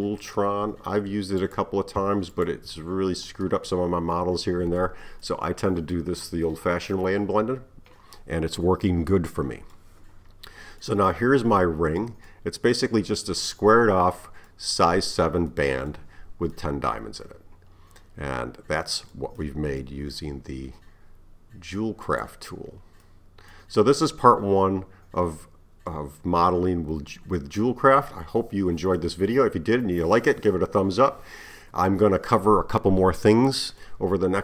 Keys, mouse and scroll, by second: 1.4 click, 2.4 shift+click, 4.2-9.3 middle drag, 10.4-10.8 scroll down 1, 10.8-22.1 middle drag, 22.1 click, 23.1-24.8 middle drag, 24.8-25.7 scroll up 3, 25.7 scroll down 1, 26.2-29.2 middle drag, 33.3-34.4 middle drag.